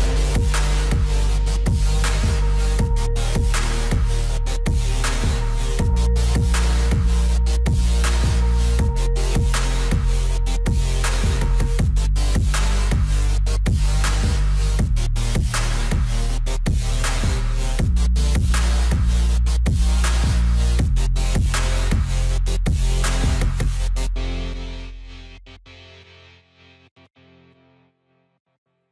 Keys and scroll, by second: 5.0 alt+w, 25.1 ctrl+z.